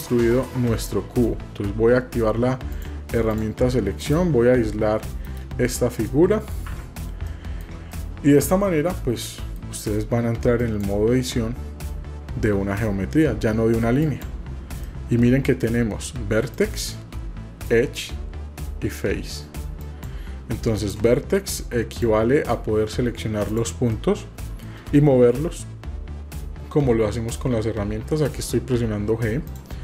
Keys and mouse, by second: 0.8 middle click, 2.7 click, 6.2 middle click, 7.4 shift+middle click, 7.9-8.7 middle drag, 8.7 typing, 8.9 middle click, 14.9 middle click, 16.5 click, 17.8 click, 19.8 click, 20.8 click, 24.1 middle click.